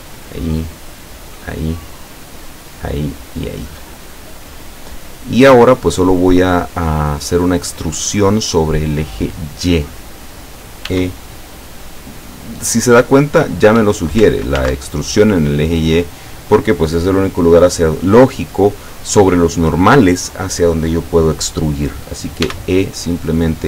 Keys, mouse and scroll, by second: 0.2 shift+right click, 1.3 shift+right click, 2.7 shift+right click, 3.4 shift+right click, 4.1-4.4 shift+scroll down 3, 5.1 scroll down 2, 6.3-7.9 middle drag, 8.2-9.5 middle drag, 10.9 e, 13.8 Escape, 14.6 ctrl+z, 22.5 e.